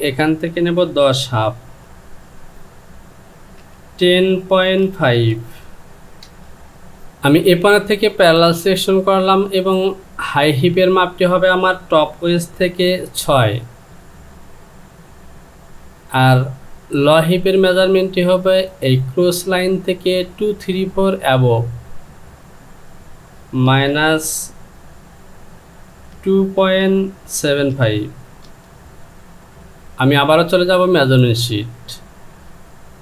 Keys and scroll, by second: 2.5 Down, 3.6 KP_1, 6.2 Return, 13.9 typing, 22.4 Down, 23.6 KP_Subtract, 26.1 KP_2.